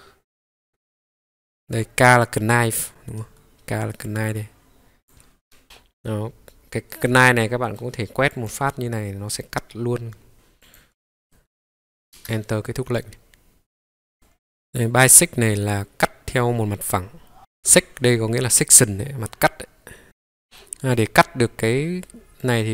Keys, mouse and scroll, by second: 2.4 right click, 4.0 click, 5.6-7.8 middle drag, 5.6-7.1 scroll down 1, 8.3-11.3 drag, 11.3 middle click, 11.5 click, 12.0 click, 14.1 Escape, 14.1 right click, 14.1 click, 14.8 click, 15.9 click, 20.0 Escape, 20.0-20.9 scroll down 1, 20.9-22.5 middle drag.